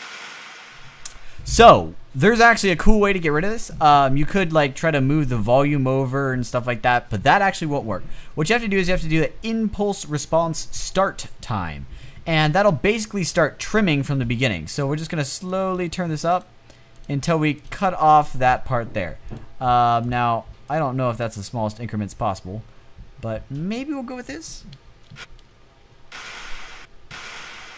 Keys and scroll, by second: 0.5 space, 2.8 typing, 24.4 space, 25.0 space, 26.1 space.